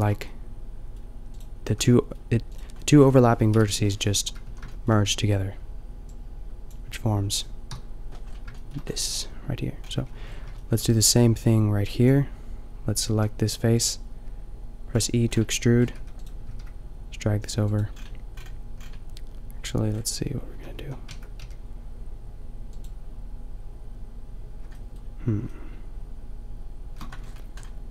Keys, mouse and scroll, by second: 1.7 click, 1.7 a, 3.5 KP_5, 4.5 a, 7.6 KP_5, 9.9 a, 10.2 a, 11.8 b, 13.3 g, 14.9 click, 15.9 e, 16.4 g, 20.5 a, 20.8 a, 21.1 Tab, 21.4 g, 27.1 Tab.